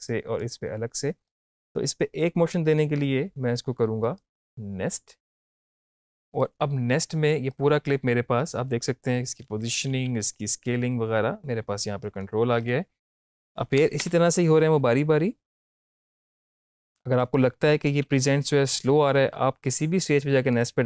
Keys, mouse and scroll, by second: 4.1 right click, 5.4-9.9 drag, 9.9 ctrl+z, 12.6 click, 13.1 Up, 14.1 space, 17.0 space, 17.4 click, 18.2 space, 20.5 click.